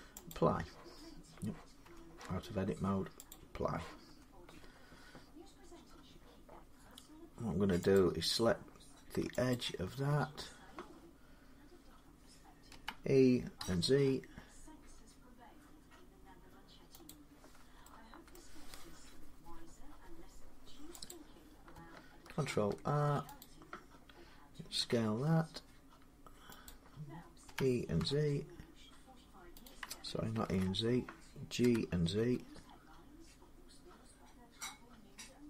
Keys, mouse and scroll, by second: 0.1 click, 1.6 Tab, 3.1 click, 3.9 Tab, 4.4-4.9 scroll up 3, 4.9 scroll down 3, 7.7 click, 9.3 alt+click, 12.5-13.4 typing, 17.1 click, 17.1 z, 18.2 middle click, 18.8-19.4 scroll up 2, 19.4-20.9 scroll down 2, 20.9 click, 22.3 ctrl+r, 23.2 click, 24.6 s, 26.5 click, 27.3-28.6 typing, 29.5 click, 30.3 ctrl+z, 31.4-32.5 typing, 32.0-35.0 drag.